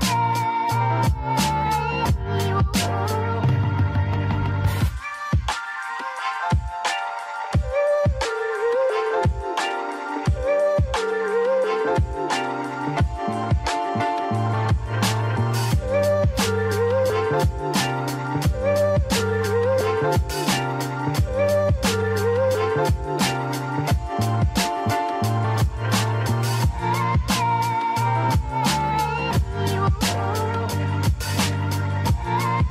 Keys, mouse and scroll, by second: 4.5 alt+Num_Lock, 4.5 alt+right click, 6.6-16.6 alt+drag, 29.4-32.7 drag.